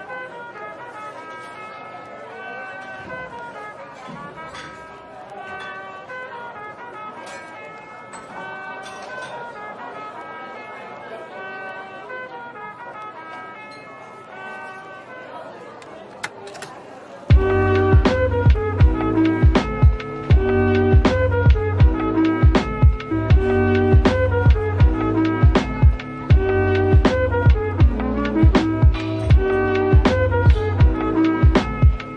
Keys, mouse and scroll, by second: 21.6 Tab, 22.2 Tab, 23.1-25.6 scroll up 1.